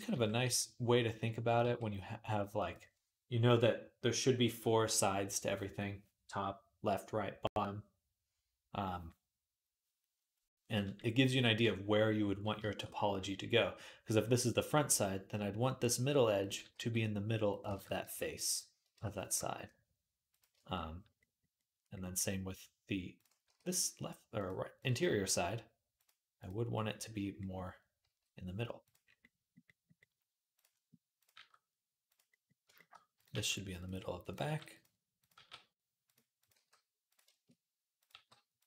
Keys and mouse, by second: 1.3 click, 1.5 g, 16.2 click, 16.2 right click, 16.5 g, 17.5 ctrl+z, 17.9 shift+Tab, 19.2 g, 22.9 click, 22.9 right click, 23.2 g, 24.6 click, 24.9 g, 27.9 g, 30.1 middle click, 30.4 click, 31.0 click, 31.1-33.0 middle drag, 31.1 g, 33.0 click, 33.0-35.2 middle drag, 33.1 g, 34.2 g, 35.0 click, 35.1 g, 35.2-36.9 drag, 36.3 g, 36.9 shift+middle click, 37.2-38.6 drag, 37.9 g.